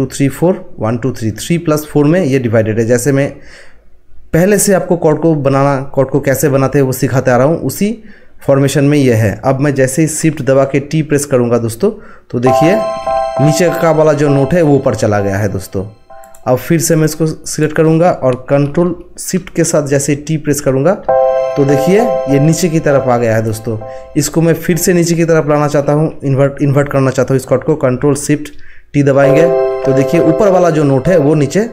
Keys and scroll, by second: 12.4 t.